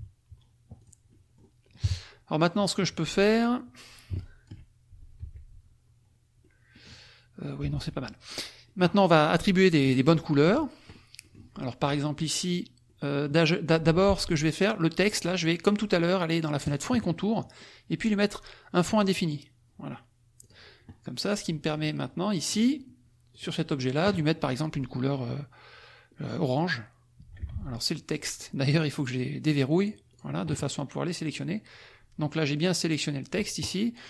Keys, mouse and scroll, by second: 0.8 click, 1.1 click, 1.9 KP_Subtract, 2.4 click, 4.2 alt+click, 5.2 F1, 6.4 click, 7.6 F1, 7.7 click, 8.2 click, 8.6 click, 9.4 click, 10.2 click, 11.2 click, 12.8 click, 14.0 F2, 14.1 click, 16.6 click, 19.0 click, 20.4 click, 21.3 click, 22.4 click, 23.5 click, 26.5 click, 27.5 ctrl+z, 28.9 click, 29.5 click, 29.8 click, 31.2 click.